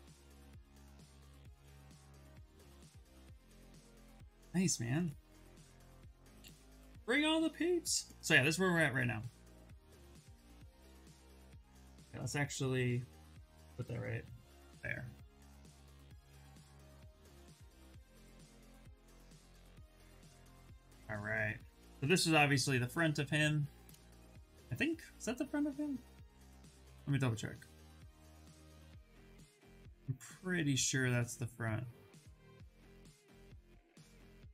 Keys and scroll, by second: 10.3 ctrl+n, 14.3 shift+s, 19.3 shift+f, 19.8 shift+f.